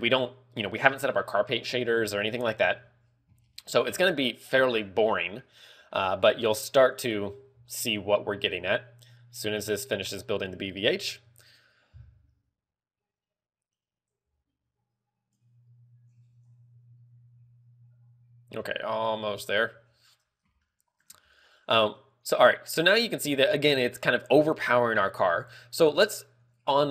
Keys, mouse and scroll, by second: 3.1 KP_1, 3.9 shift+middle click, 5.0 scroll up 2, 5.4 shift+middle click, 5.9 scroll up 1, 14.4 click, 20.9 shift+middle click.